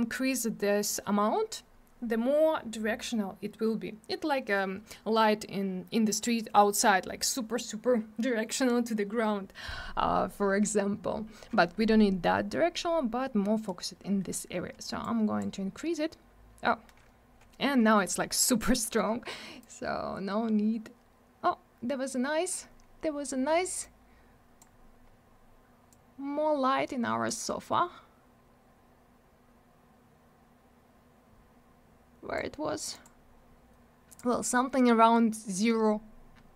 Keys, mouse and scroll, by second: 15.0 click, 19.6 click, 23.8 click, 25.9 click, 32.9 click, 33.0 click, 34.1 click, 34.2 click.